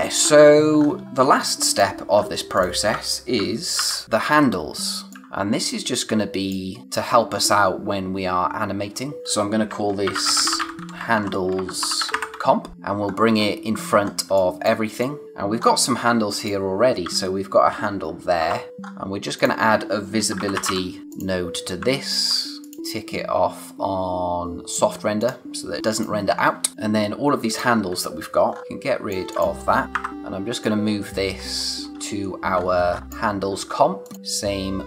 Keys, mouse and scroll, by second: 0.7-1.1 scroll down 2, 0.8 space, 1.1 space, 1.3 click, 1.7 space, 2.1 scroll up 1, 2.5 click, 3.7 ctrl+h, 4.2-5.0 scroll down 1, 5.0 click, 5.5 click, 6.7 space, 6.8 click, 9.2 click, 9.7-12.6 typing, 12.7 scroll down 1, 13.0-13.9 scroll up 1, 13.9 scroll down 1, 14.2 space, 14.3 click, 14.7 space, 14.9 click, 15.2 scroll down 1, 15.5-16.3 scroll up 1, 16.3 click, 18.3 o, 18.7 scroll up 1, 19.3 click, 20.1-21.1 typing, 21.0 click, 22.5 click, 24.6 click, 26.2 scroll down 1, 26.7 space, 27.4 click, 28.4 scroll up 1, 29.2 alt+click, 30.1 scroll up 1, 30.5 click, 31.3-32.4 scroll down 1, 32.4 scroll up 1, 34.0 click.